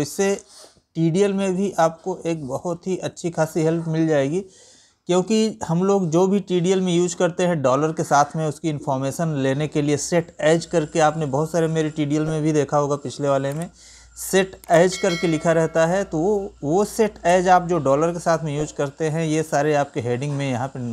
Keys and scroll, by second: 1.3 Right.